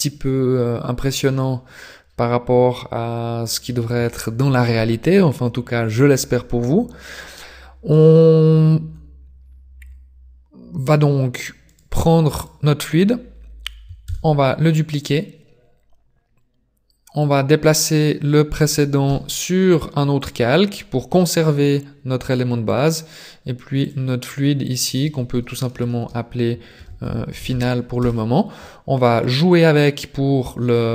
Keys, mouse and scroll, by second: 4.0 shift+middle click, 4.7 scroll up 3, 5.2 middle click, 8.9 scroll down 6, 9.8 scroll up 5, 10.6-10.9 scroll up 2, 11.8 right click, 12.6 right click, 14.1 shift+d, 17.2 click, 19.0 m, 22.7 click, 23.8 click, 24.2 click, 26.0 BackSpace, 29.2 middle click.